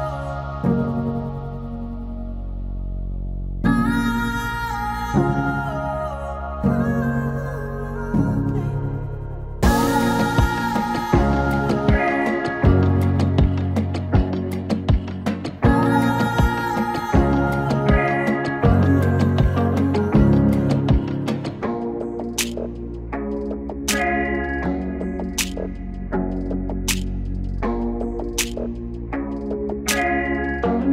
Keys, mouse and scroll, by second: 3.9-8.0 drag, 8.0-17.6 drag, 17.6-20.9 drag, 24.9-30.9 drag.